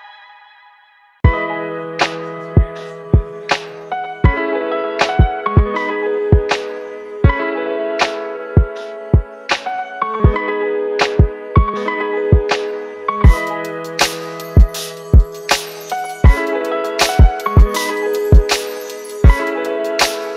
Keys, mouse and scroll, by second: 2.5-4.7 scroll up 1, 12.0 ctrl+t, 12.6 ctrl+t, 13.1 alt+shift+click, 19.6 alt+shift+click.